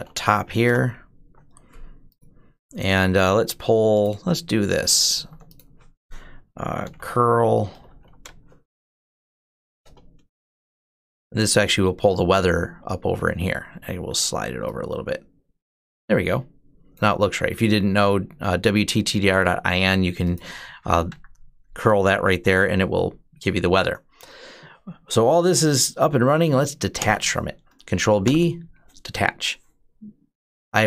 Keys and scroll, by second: 0.0-0.4 typing, 0.5 Return, 4.5 ctrl+a, 4.9 ctrl+c, 6.4-8.3 typing, 8.9 ctrl+shift+Insert, 9.6 Return, 20.9 Up, 26.8 ctrl+b, 28.0 d.